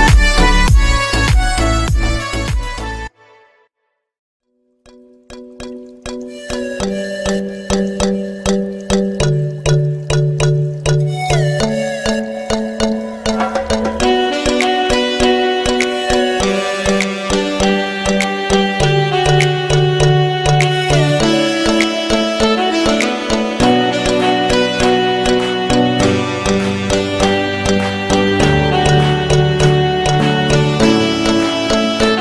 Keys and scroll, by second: 5.4 c.